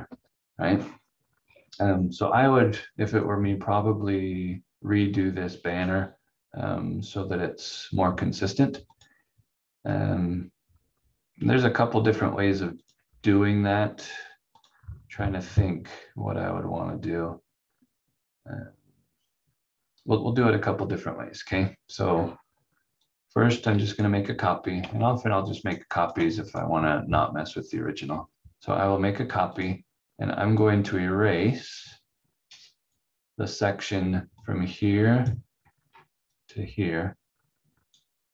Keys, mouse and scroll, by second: 0.1 Delete, 0.7 scroll down 1, 3.3 scroll up 1, 6.0-7.8 scroll down 1, 8.9 click, 12.7 click, 22.1 scroll down 1, 23.0 click, 24.2 scroll down 1, 24.9 ctrl+click, 25.5 ctrl+right click, 27.6 scroll up 1, 29.5 click, 35.5 scroll down 1, 36.3 click.